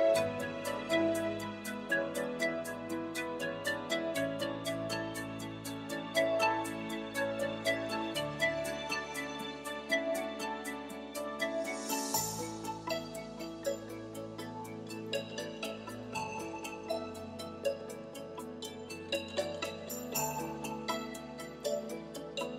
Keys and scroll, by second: 9.1 3, 16.3 q, 17.6 i, 21.8 3.